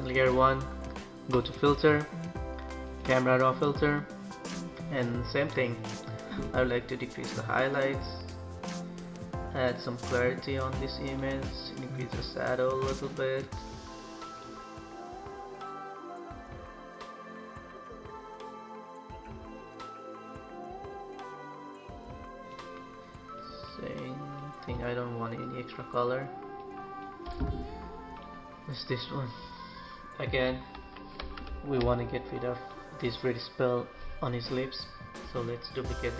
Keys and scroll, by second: 30.7 ctrl+=, 31.7 ctrl+space.